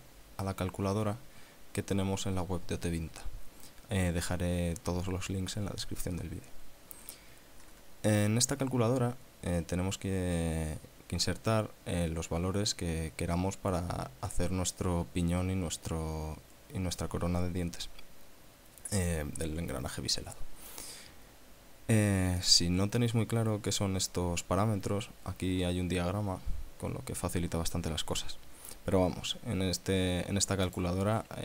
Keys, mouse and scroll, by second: 0.9-1.3 scroll up 2, 22.4 click, 23.0-24.0 scroll down 4, 26.7 scroll down 2, 30.6 click.